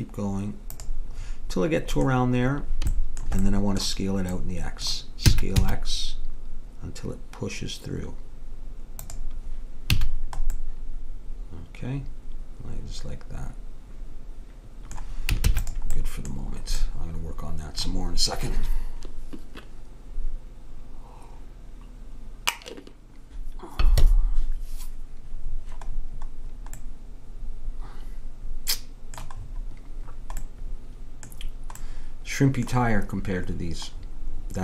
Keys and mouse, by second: 1.2-5.3 middle drag, 5.3 s, 10.0 a, 10.1-11.9 middle drag, 15.5 ctrl+s, 16.0 middle click, 17.1 middle click, 18.3 middle click, 26.9-28.5 middle drag, 30.1-34.6 middle drag.